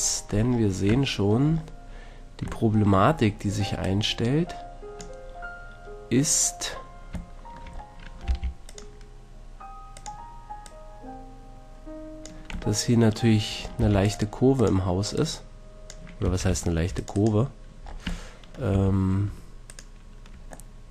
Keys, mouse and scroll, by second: 0.6 click, 3.8-6.2 drag, 6.2-8.1 middle drag, 8.2 ctrl+r, 9.4 click, 10.1-12.5 drag, 13.7 ctrl+r, 16.2 a, 16.7 c, 17.3-18.7 right drag, 18.7 a.